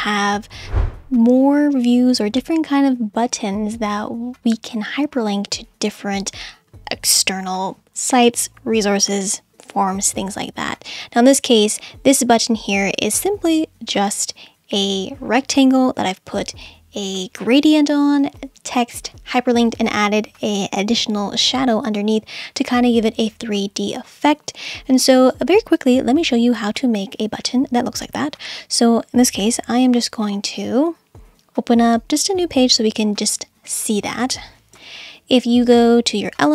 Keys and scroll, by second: 34.8 BackSpace.